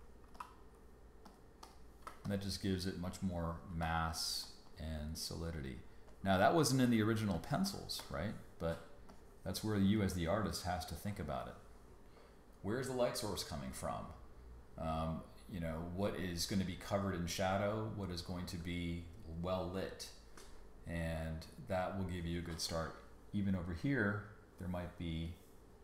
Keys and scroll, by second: 0.3 g, 2.1 space, 3.7 b.